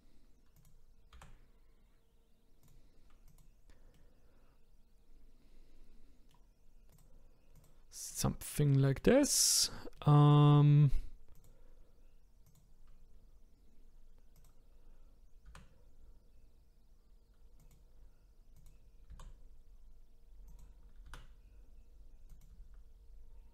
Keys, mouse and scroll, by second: 1.2 g, 3.3 click, 4.0-6.9 middle drag, 6.9 click, 7.5 click, 8.1-9.5 middle drag, 9.5-10.0 scroll down 2, 10.0-11.4 middle drag, 11.4 click, 12.5 click, 13.1-14.4 scroll up 1, 14.4 click, 15.5 g, 18.6 click, 19.1 g, 21.0 r, 22.5 s.